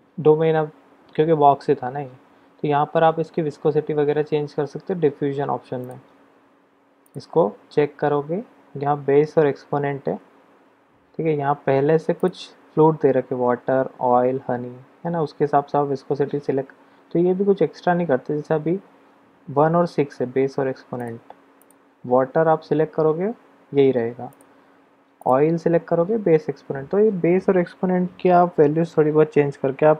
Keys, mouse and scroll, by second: 5.7 click, 7.2 click, 12.3-19.5 drag, 21.0-22.5 drag, 24.3-25.8 drag, 25.8-26.3 middle drag, 25.8-26.3 scroll down 1.